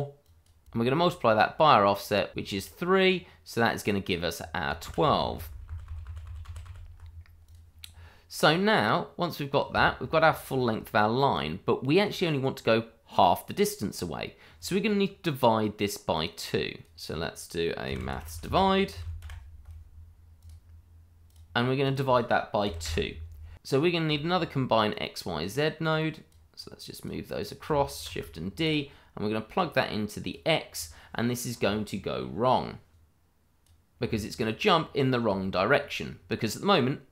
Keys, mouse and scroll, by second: 0.6 ctrl+z, 2.3 click, 4.8 ctrl+z, 7.4 click, 11.3 click, 16.1 click, 17.8-19.2 typing, 20.3 click, 22.6 2, 22.8 Return, 24.1 scroll down 1, 24.3 shift+middle click, 24.7-25.1 scroll up 1, 25.2 middle click, 25.3 shift+middle click, 25.7 click, 28.0 shift+d, 28.6 click, 32.9 click, 34.3-35.3 scroll down 1, 35.4 shift+middle click, 35.5 middle click, 35.5 shift+middle click.